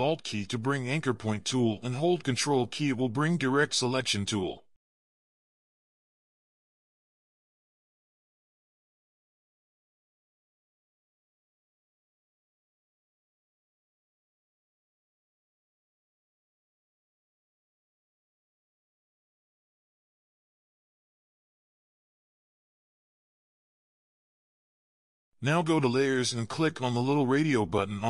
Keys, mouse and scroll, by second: 1.2 ctrl+z, 1.8 alt+click, 7.8 ctrl+click, 10.8 alt+click, 14.5 scroll up 1, 14.8 scroll down 1, 15.0 ctrl+scroll up 1, 16.3 alt+click, 19.7 ctrl+scroll down 1, 20.3 alt+scroll down 1, 20.7 scroll up 1, 27.0 double click.